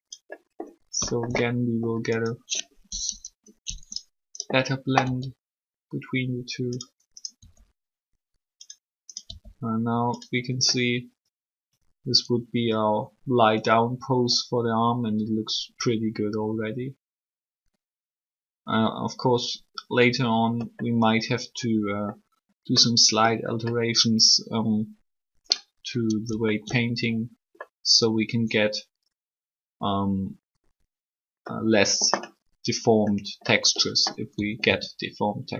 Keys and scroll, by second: 3.0 3, 7.4 r, 34.1-34.6 typing.